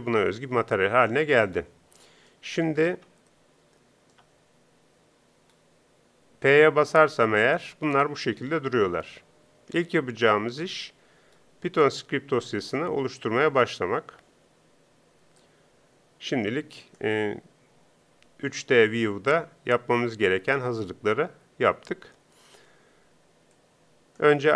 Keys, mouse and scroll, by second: 7.2 p, 9.5 p, 15.4-16.5 drag.